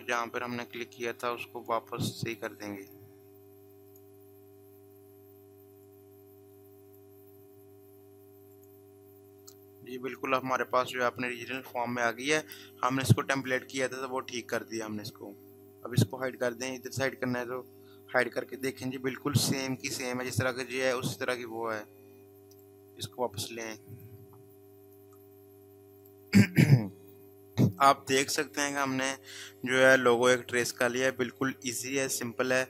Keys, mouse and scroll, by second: 1.6 click, 16.2 click, 22.3 click.